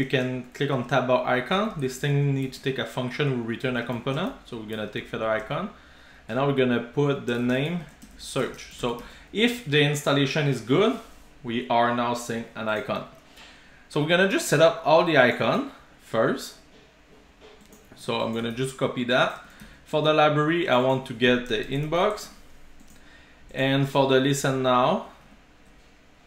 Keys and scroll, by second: 4.0 super+v, 9.1 super+s, 15.6 super+c, 19.7 super+v, 22.2 super+s, 24.4 super+v, 25.3 super+z.